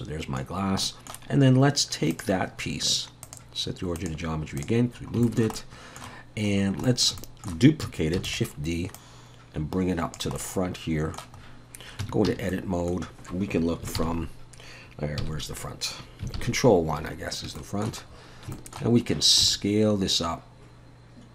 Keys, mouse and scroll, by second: 0.6 scroll down 1, 0.8 middle click, 1.3-2.1 scroll up 2, 2.1 click, 3.3 click, 4.9 scroll down 2, 5.2 shift+middle click, 5.6 middle click, 6.6 scroll down 1, 6.9 shift+middle click, 7.2 middle click, 8.2 shift+d, 9.0 click, 10.4 middle click, 11.4-11.9 scroll up 2, 12.0 Tab, 12.3 a, 12.5 middle click, 14.0 ctrl+KP_3, 15.2 KP_1, 16.4 ctrl+KP_1, 17.6 shift+middle click, 18.0-18.5 scroll up 3, 18.5 shift+middle click, 19.0-19.4 scroll up 2, 19.4 s.